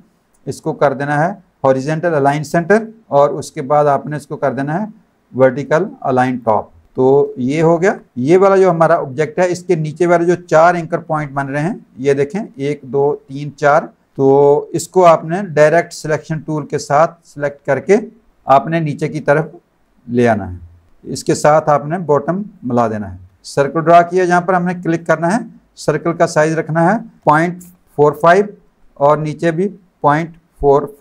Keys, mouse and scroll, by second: 2.7 click, 6.4 click, 8.0 click, 8.3 click, 14.0 alt+click, 14.1 space, 14.2 click, 15.2 a, 15.6 click, 19.1 click, 23.3 space, 24.9 click, 27.2 KP_Decimal, 27.6 KP_4, 28.1 KP_5, 30.0 KP_Decimal, 30.6 KP_4.